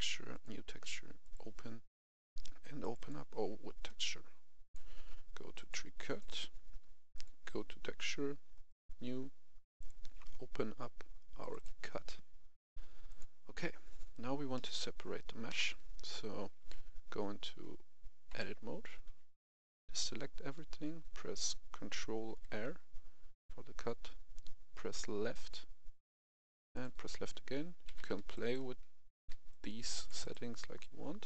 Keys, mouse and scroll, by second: 14.5 middle click, 15.5 KP_1, 18.3 Tab, 19.0 a, 20.5-20.9 scroll up 1, 22.4 ctrl+r, 25.3 click, 27.8 a, 28.1 x, 28.3 click, 29.2 c, 29.4 click, 30.2 right click, 30.8 click.